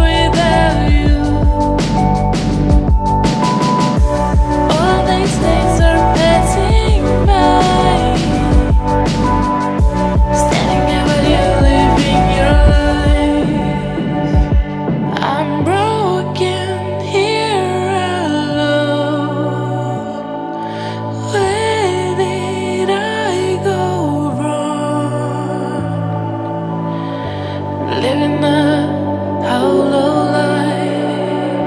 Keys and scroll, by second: 8.1 BackSpace, 10.9-17.0 typing, 12.9 Caps_Lock, 18.7 BackSpace, 18.9 BackSpace, 19.5 BackSpace, 20.5 BackSpace, 21.8-24.6 typing, 26.4-27.7 typing.